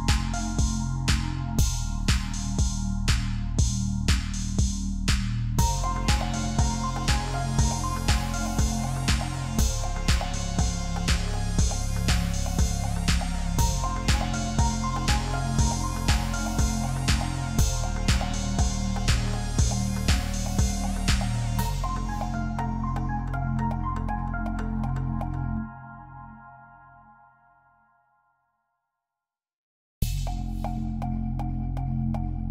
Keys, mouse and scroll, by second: 3.0 double click, 13.8 double click, 22.3 Return, 26.8 double click, 29.0 double click, 31.7 double click.